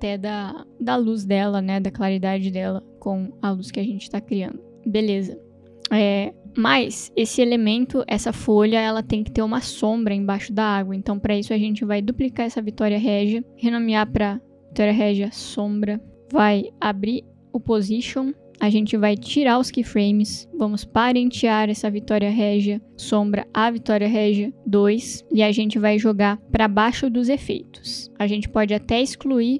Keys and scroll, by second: 12.1 ctrl+d, 13.5 Right, 13.8-17.4 typing, 17.2 Return.